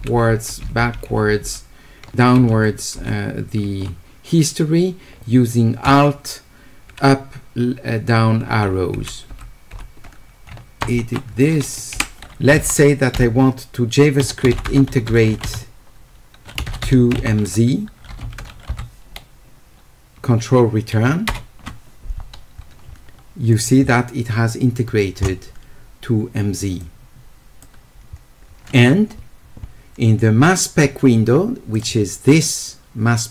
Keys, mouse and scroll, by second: 14.2-15.8 typing, 17.5 w, 26.8 click, 31.7 click.